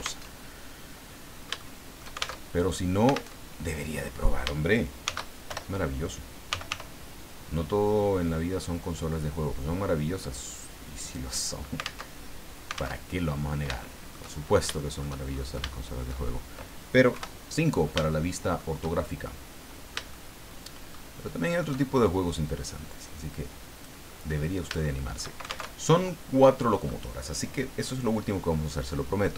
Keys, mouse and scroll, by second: 0.2 alt+Tab, 1.6 shift+middle click, 2.4 alt+shift+Tab, 3.3 alt+Tab, 5.0 shift+d, 5.5 shift+Return, 6.2-7.2 typing, 11.0 click, 12.0 alt+Tab, 12.9 alt+Tab, 13.3-13.8 scroll up 3, 13.8 shift+middle click, 14.3-14.6 shift+scroll up 2, 14.8 shift+middle click, 15.3 shift+scroll up 2, 15.7 shift+middle click, 17.1 KP_5, 18.1 shift+middle click, 18.9 shift+scroll down 1, 19.2-21.0 shift+middle drag, 21.2 shift+middle click, 22.5-24.0 drag, 24.0-24.6 scroll down 2, 24.8 shift+middle click, 25.7 alt+shift+Tab.